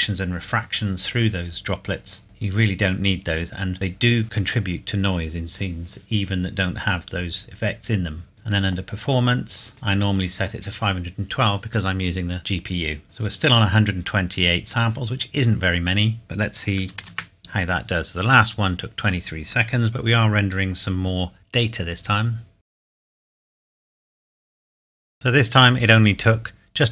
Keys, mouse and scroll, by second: 8.3 scroll down 1, 8.5 click, 8.9-9.7 scroll down 1, 9.7 click, 13.0-13.8 scroll up 1, 14.0 scroll up 1, 16.9 ctrl+Num_Lock, 16.9 scroll up 1, 17.0 ctrl+s, 22.7 F12, 25.0-26.4 scroll down 1.